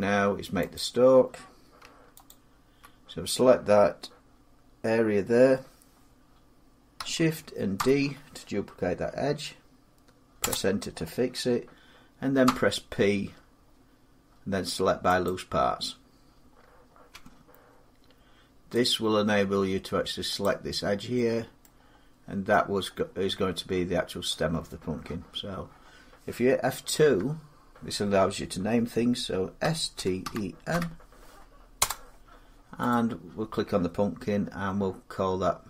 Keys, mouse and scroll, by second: 0.5 click, 2.1 alt+click, 7.5 shift+d, 10.2 Return, 12.2 p, 15.3 click, 16.3 scroll, 16.5 scroll down 2, 16.9 Tab, 18.7 click, 19.4 scroll, 20.2 click, 21.4 scroll up 4, 21.4 middle click, 21.6-22.3 scroll down 5, 22.6 middle click, 26.8 F2, 29.4-30.5 typing, 31.6 Return, 32.7 click.